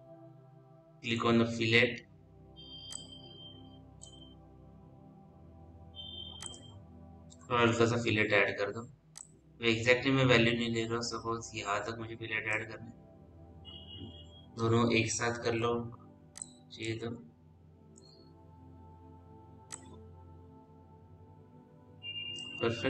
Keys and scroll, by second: 15.8 ctrl+z.